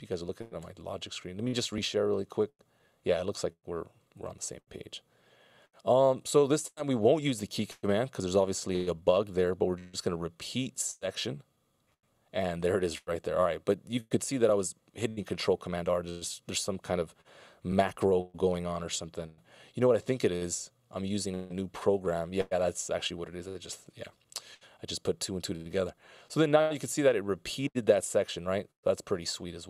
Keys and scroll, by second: 5.6 p, 24.0 p, 28.3 c.